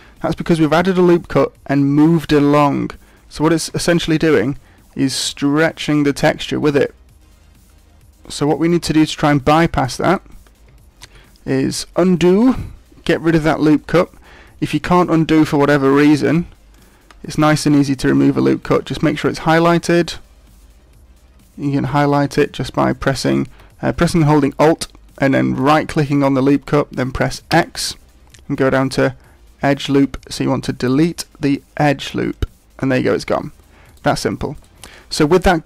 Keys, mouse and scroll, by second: 3.6 g, 10.1 right click, 11.0 ctrl+z, 15.9 ctrl+r, 17.6 ctrl+r, 21.9 alt+right click, 25.6 alt+right click, 27.5 x, 33.9 right click, 34.5 right click.